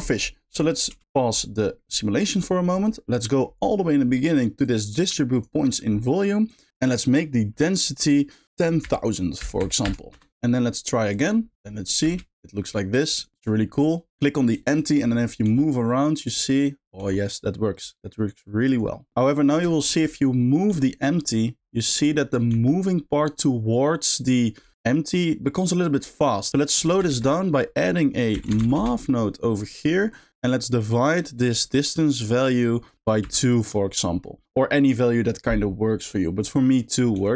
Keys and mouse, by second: 0.5 click, 0.9 space, 1.5 middle click, 2.2 middle click, 3.2 middle click, 4.6 click, 5.3 click, 5.6 middle click, 6.6-10.1 drag, 9.6 0, 11.2 click, 11.7 middle drag, 12.1 space, 12.4 middle click, 13.2 click, 13.4 click, 13.8 click, 14.6 shift+middle drag, 15.1 middle drag, 15.5 g, 17.1 g, 19.3 middle click, 19.8 shift+middle click, 20.8 g, 22.2 shift+middle click, 22.5 g, 24.7 g, 27.1 shift+a, 30.2 click, 31.5-32.5 drag, 32.9 click, 37.2 g.